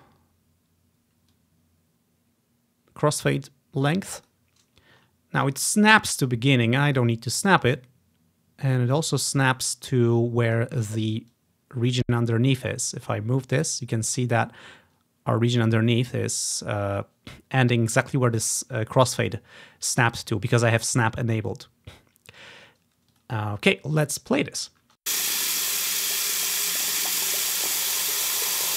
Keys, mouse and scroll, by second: 0.9 typing, 1.5-4.5 drag, 5.3-6.6 ctrl+scroll up 3, 5.5-6.9 typing, 5.7-7.2 drag, 7.9-8.9 drag, 9.2 click, 9.4-10.2 typing, 9.9 click, 11.5 click, 12.2-12.9 typing, 12.4 click, 16.1-16.9 typing, 23.2 click, 24.9 space.